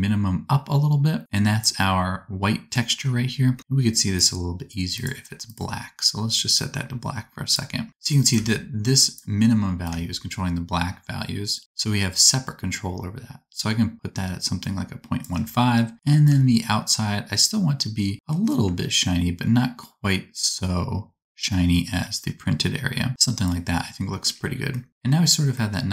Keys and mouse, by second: 4.2 middle click, 5.0-25.9 drag.